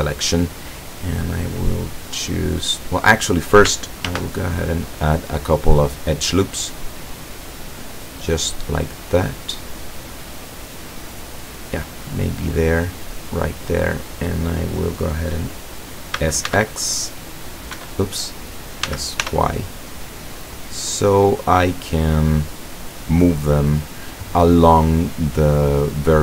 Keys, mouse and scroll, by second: 4.2 ctrl+r, 7.1-11.8 scroll up 1, 11.8 click, 12.9 click, 16.3 s, 16.6 x, 17.8 Escape, 18.9 s, 19.3 y, 24.8 click.